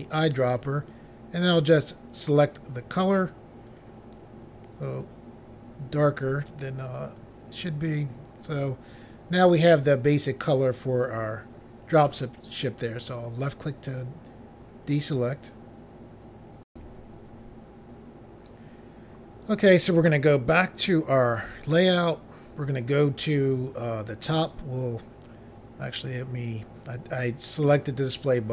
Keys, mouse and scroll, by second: 0.1 click, 0.2 click, 1.8 click, 3.7 click, 5.0 click, 6.9 click, 9.4-10.6 scroll down 2, 13.0 click, 13.1 click, 16.7 Pause, 21.2 click, 21.3 click, 24.3 click, 24.4 click, 25.9 click, 26.1 click.